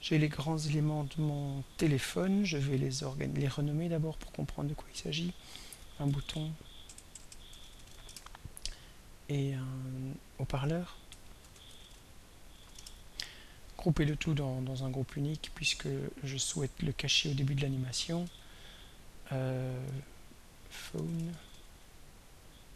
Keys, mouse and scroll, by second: 2.8 click, 3.4 click, 4.7 click, 5.8 ctrl+a, 6.1 ctrl+b, 6.2 ctrl+o, 6.3 ctrl+u, 6.5 ctrl+t, 6.9 ctrl+BackSpace, 7.5 ctrl+u, 7.6 ctrl+t, 7.9 ctrl+o, 8.1 ctrl+Return, 9.0 click, 9.6 click, 10.4 click, 11.3 ctrl+a, 11.5 ctrl+s, 11.7 ctrl+p, 11.8 ctrl+e, 11.9 ctrl+a, 12.1 ctrl+k, 12.3-13.1 typing, 14.2 shift+click, 15.3 click, 16.5 click, 17.1 click, 18.4 ctrl+a, 20.7-22.0 typing.